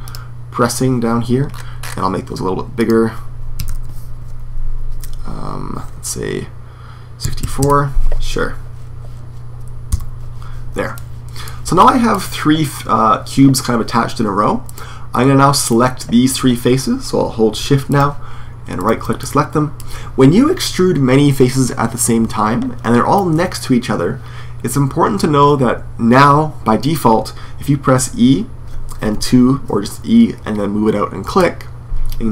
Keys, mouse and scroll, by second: 2.6-7.4 drag, 9.8 n, 10.7-14.5 middle drag, 14.5-16.4 right drag, 17.7-19.4 right drag, 19.0-27.8 middle drag, 27.8 e.